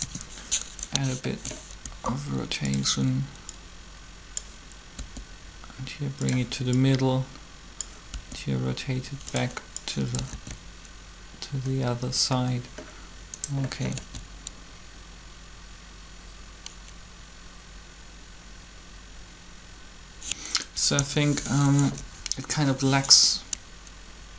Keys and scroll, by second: 1.8 alt+shift+r, 5.0 r, 8.1 r, 10.3 alt+a, 13.9 alt+a, 20.8 3, 22.0 Up, 22.1 Up.